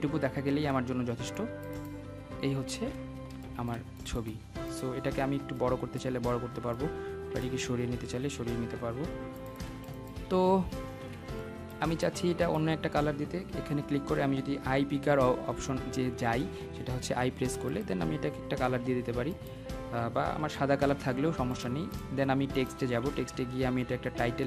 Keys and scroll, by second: 22.8 ctrl+z.